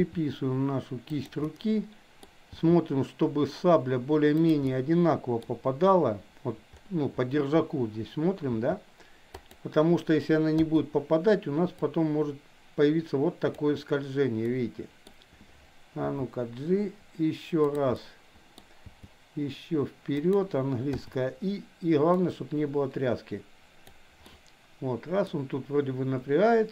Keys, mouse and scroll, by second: 1.4 middle click, 2.4 g, 4.6 middle click, 8.4 g, 10.6 i, 11.8-13.7 drag, 14.4-15.1 middle drag, 16.1 g, 17.9-18.7 middle drag, 18.8 g, 20.9 i, 22.3-24.1 drag, 24.3-25.3 middle drag.